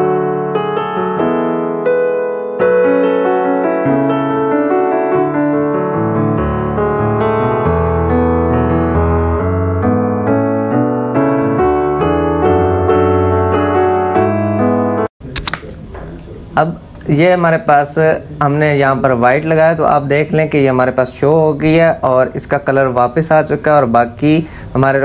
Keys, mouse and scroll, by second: 0.6 click, 1.6 ctrl+alt+z, 2.1 ctrl+d, 2.3-4.1 typing, 2.3 click, 3.1 click, 3.5 click, 4.4 click, 5.3 space, 5.5 click, 5.5 click, 5.8 space, 6.1 click, 6.1 space, 6.3 ctrl+alt+z, 6.9 ctrl+alt+z, 8.0-9.9 typing, 8.7 click, 10.0-11.6 drag, 11.6 z, 11.7 click, 12.0 click, 12.1 space, 12.2-13.7 drag, 14.4-14.9 typing.